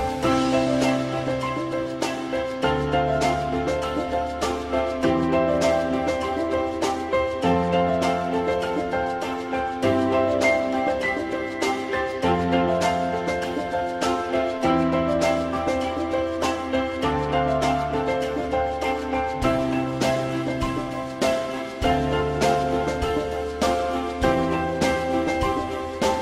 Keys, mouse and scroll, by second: 1.8 alt+middle click, 3.9 ctrl+click, 10.4 alt+middle click, 13.2 alt+middle click, 19.6 shift+click, 23.6 alt+middle click.